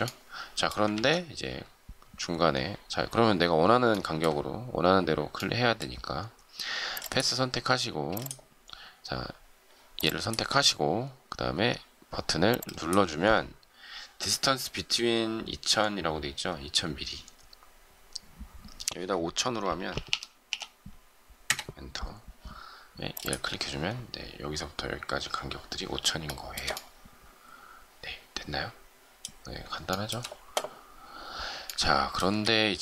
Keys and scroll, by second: 0.8 ctrl+z, 7.9 space, 21.4 Return, 21.4 typing.